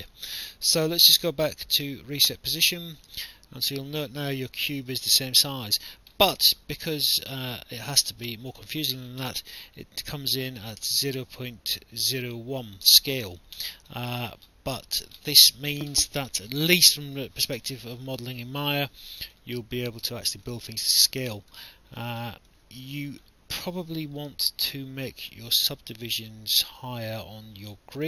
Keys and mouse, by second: 1.2 click, 2.5 click, 3.7 click, 5.7 alt+click, 6.2 alt+middle click, 7.6 alt+click, 13.9 alt+click, 17.5 click, 19.5 alt+click, 21.7 alt+click.